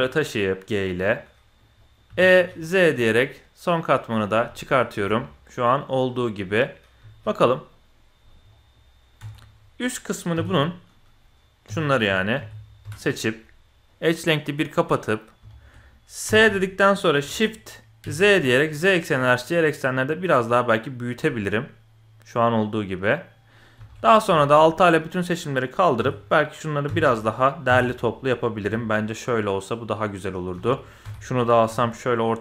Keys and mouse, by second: 1.1-1.6 drag, 1.8 click, 2.1 e, 4.6 click, 5.0 Tab, 5.1-5.8 drag, 6.4 click, 7.0 z, 7.7 click, 8.6 click, 9.2 Tab, 10.3 l, 10.5 click, 11.6 l, 12.0 l, 12.4 l, 12.8 l, 13.9-15.0 drag, 15.5 shift+click, 16.2 s, 21.3-23.5 middle drag, 23.7 alt+a, 24.3 shift+click, 26.0 l, 26.8 KP_6, 27.7 KP_7, 28.6 g, 30.5 alt+a, 31.0 l, 31.7 g.